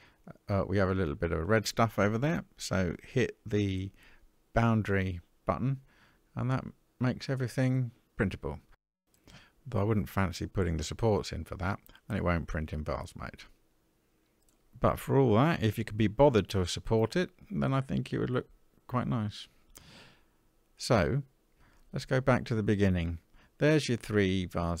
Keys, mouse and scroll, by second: 5.0 click, 5.8-6.6 middle drag, 7.6-8.1 shift+middle drag, 8.4-8.8 scroll down 2, 8.9-9.5 middle drag, 10.1-11.2 middle drag, 11.3 scroll up 1, 12.0-13.0 middle drag, 13.3 scroll down 1, 14.0-15.4 middle drag.